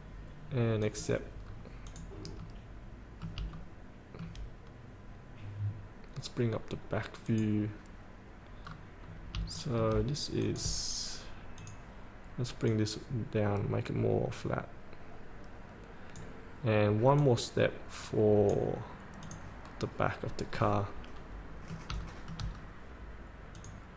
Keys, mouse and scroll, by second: 1.0 click, 1.6 scroll up 1, 2.0 click, 2.5 middle click, 3.7 shift+middle click, 7.4 click, 8.8 scroll down 1, 9.7 shift+middle click, 10.6-18.8 drag, 20.3 scroll up 1, 21.4 middle click, 22.7 scroll down 1, 23.7 click.